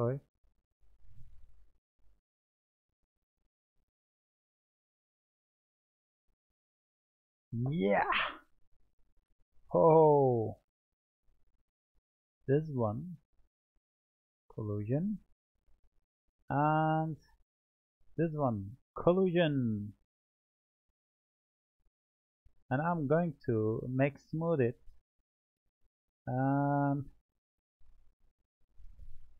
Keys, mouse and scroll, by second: 10.3-13.0 drag, 14.4-15.1 drag, 15.1-17.1 middle drag, 17.1 click, 18.9-20.0 drag, 21.3-21.9 scroll down 1, 21.9-22.6 middle drag, 22.6 click, 23.1-25.6 right drag, 25.6-26.7 drag, 26.7-27.4 scroll up 2, 27.4-29.3 middle drag.